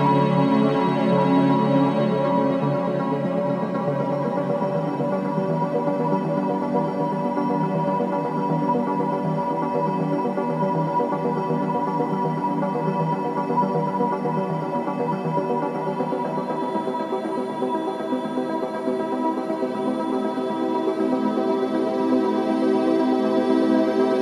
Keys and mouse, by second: 0.0 alt+z, 0.8 Tab, 1.1 click, 1.7 alt+z, 2.3-4.6 middle drag, 5.6-6.3 shift+middle drag, 6.6-7.8 middle drag, 8.2 s, 9.0 click, 12.9 s, 15.1 Tab, 15.7 middle click, 16.3-16.7 drag, 16.8 alt+z, 17.5 alt+z, 18.5 Tab, 19.6-20.0 drag, 20.0-24.2 middle drag.